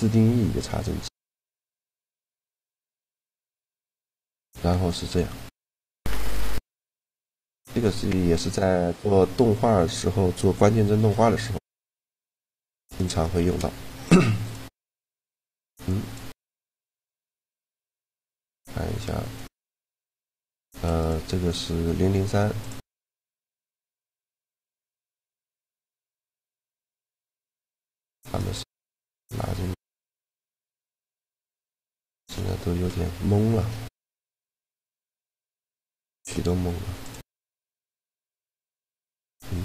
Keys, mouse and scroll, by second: 0.5-2.1 middle drag, 2.6-4.4 drag, 4.4-8.7 middle drag, 9.0 middle click, 10.9 g, 12.2 a, 12.9 right click, 13.1 shift+g, 15.3 shift+g, 19.0-20.7 drag, 20.9-22.2 right drag, 22.2-24.1 drag, 24.7-26.6 right drag, 26.9-30.5 right drag, 29.1 shift+g, 35.4-37.4 right drag, 36.7-38.4 drag, 38.4-39.6 middle drag.